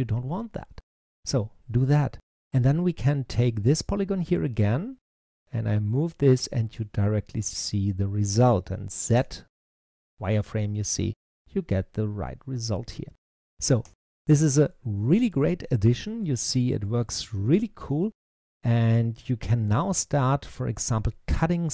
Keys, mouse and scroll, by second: 2.2-3.2 scroll up 1, 3.2 click, 3.7-5.1 middle drag, 5.1 click, 9.0 z, 10.2-13.3 middle drag, 13.8 z, 14.6-19.6 middle drag, 19.6 click, 20.0-21.7 middle drag.